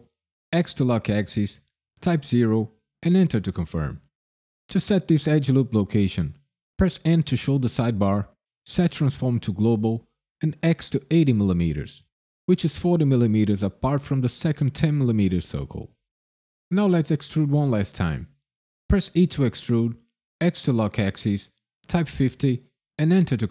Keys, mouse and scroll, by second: 0.5 x, 2.3 KP_0, 3.0 KP_Enter, 7.0 n, 9.5 click, 10.3 click, 19.1 e, 20.4 x, 21.9 KP_5, 22.1 KP_0, 23.0 KP_Enter.